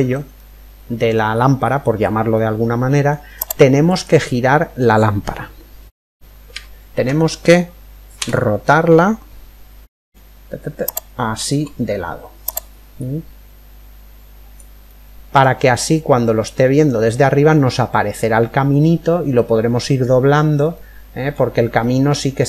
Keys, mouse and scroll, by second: 7.7 r, 11.5-13.2 middle drag, 12.5 click, 14.4-17.2 middle drag, 20.3-22.4 middle drag.